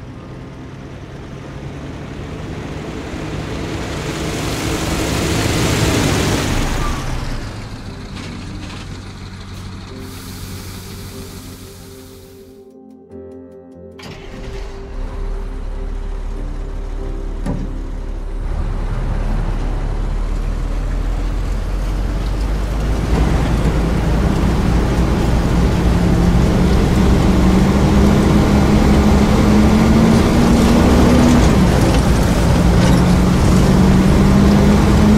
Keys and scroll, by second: 0.6 a, 1.5 a, 5.9 d, 6.6 s, 8.1 q, 16.9 e, 18.4 w, 21.4 d, 22.7 d, 23.1 e, 25.9 d, 31.2 e.